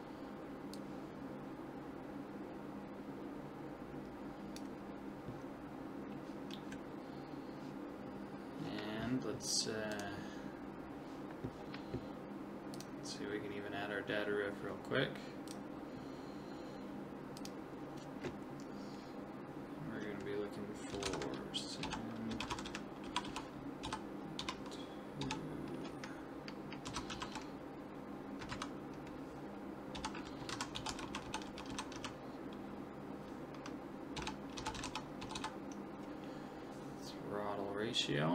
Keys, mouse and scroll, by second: 0.8 click, 2.6 click, 9.9 click, 12.8-14.6 drag, 15.5 click, 17.4 click, 22.5 c, 35.4 t.